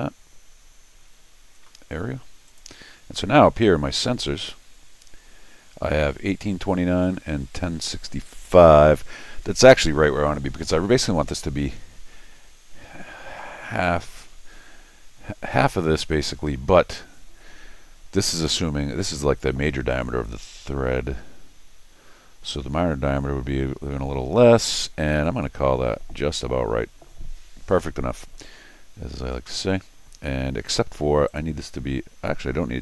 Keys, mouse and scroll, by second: 2.5 click, 4.4 click, 31.3 click.